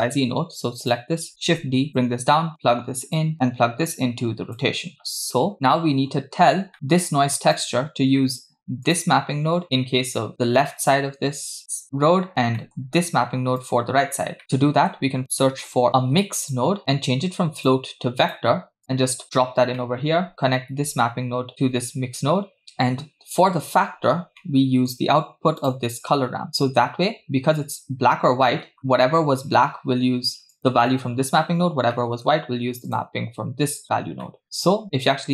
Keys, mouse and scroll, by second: 0.9 click, 1.5 shift+d, 2.6 click, 3.5-4.6 drag, 4.9 middle click, 6.0-6.7 scroll down 5, 6.7 right click, 6.7 click, 7.6 click, 8.2-8.8 scroll up 2, 8.9 click, 12.6 middle click, 13.6 click, 14.4 middle click, 15.6 shift+a, 15.9 BackSpace, 16.8-17.5 scroll up 1, 17.5 scroll up 1, 17.6-18.4 drag, 18.8-19.4 drag, 19.8 middle click, 20.3-20.7 scroll down 2, 20.9-21.8 alt+right drag, 24.1-24.4 scroll down 3, 24.4 middle click, 25.6 click, 26.5 click, 27.0-28.1 scroll up 3, 28.5 middle click, 30.6 click, 32.0 middle click, 32.9 click, 33.9 scroll down 2, 34.2 middle click, 35.0 space.